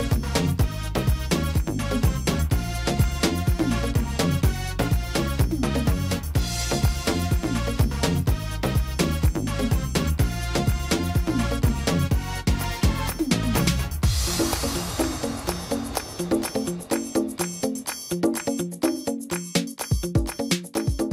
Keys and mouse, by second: 0.0-0.6 middle drag, 0.6-1.8 drag, 1.8 middle drag, 2.6-3.7 middle drag, 5.2-5.7 drag, 5.9-7.9 middle drag, 11.0-11.4 drag, 13.1 drag, 13.8 s, 17.4-21.1 middle drag, 20.0 y.